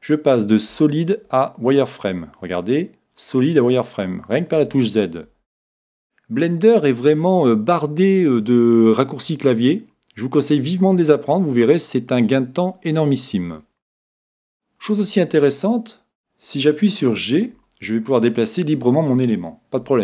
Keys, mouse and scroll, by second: 0.7 z, 2.4-4.4 drag, 4.5 z, 5.2 z, 14.6-17.5 middle drag, 17.5 g.